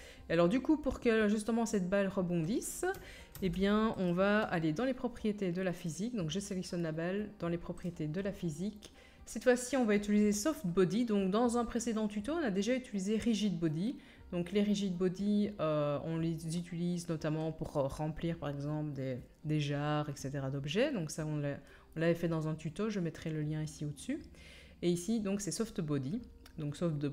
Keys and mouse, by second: 2.7 middle click, 3.3 ctrl+a, 5.8 middle click, 7.8 middle click.